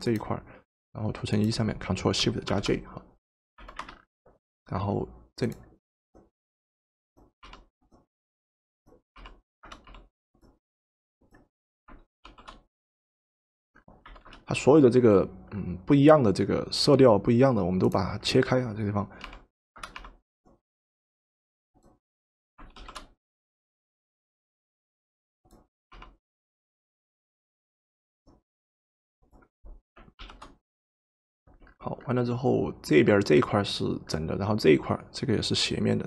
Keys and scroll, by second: 3.6 v, 7.4 w, 9.2 w, 9.9 w, 14.1 v, 19.3 w, 20.1 w, 25.9 ctrl+shift+w.